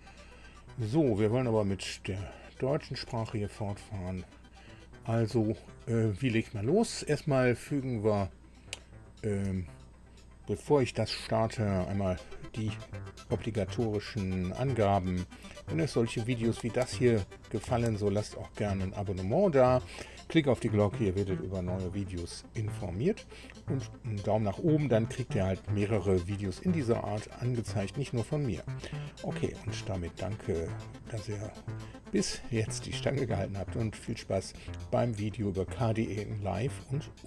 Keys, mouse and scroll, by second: 0.0 click, 2.7 click, 3.8 click.